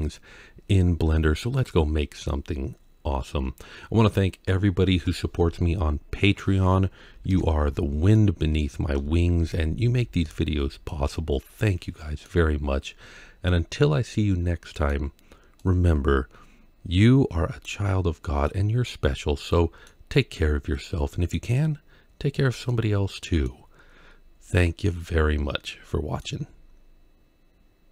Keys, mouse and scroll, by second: 5.9-6.4 scroll up 2, 7.1 ctrl+z, 7.9-8.5 middle drag, 9.2 KP_Decimal, 9.9 scroll down 1, 10.7-12.1 middle drag, 13.3-14.7 middle drag, 15.4-17.5 middle drag, 18.3-19.7 middle drag, 20.6-21.2 middle drag, 21.5 scroll up 2, 22.5 middle click, 24.0-24.6 scroll down 3, 24.7-26.0 middle drag.